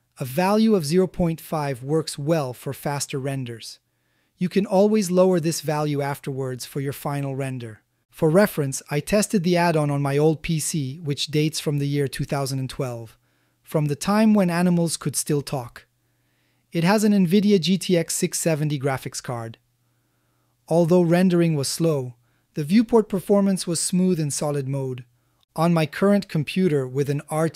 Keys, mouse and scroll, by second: 4.9 click, 5.3-7.2 drag, 8.0 a, 8.6 ctrl+a, 9.2-10.0 ctrl+middle drag, 10.3-11.7 middle drag, 12.1-13.9 ctrl+middle drag, 14.5-17.4 middle drag, 17.8-18.7 shift+middle drag, 19.0-20.8 middle drag, 21.5-21.9 shift+middle drag, 22.1 z, 24.9-25.6 middle drag, 26.0 ctrl+alt+z, 26.7 ctrl+alt+z, 27.3 shift+middle drag.